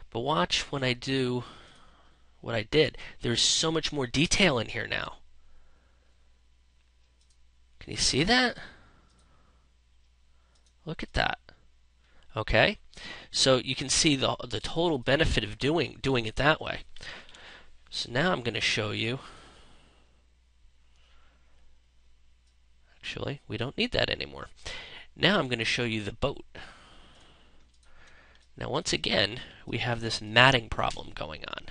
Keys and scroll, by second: 16.9 ctrl+0, 27.7 ctrl+space.